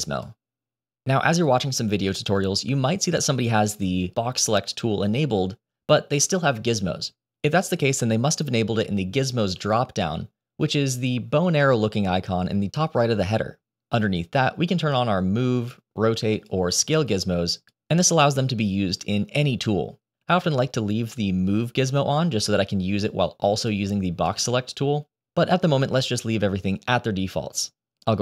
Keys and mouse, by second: 4.0 click, 14.3-22.3 drag, 23.0 click, 23.8-24.1 drag, 25.6-28.2 drag.